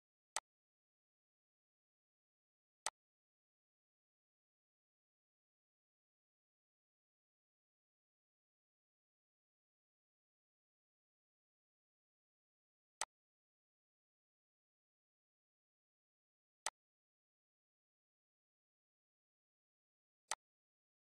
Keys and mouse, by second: 0.0 click, 0.8 ctrl+d, 1.7 click, 3.2 click, 4.8 Delete, 5.7 click, 6.7 Delete, 9.7 click, 11.2 click, 11.9 click, 12.7 click, 14.1 click, 15.7 click, 17.5 click.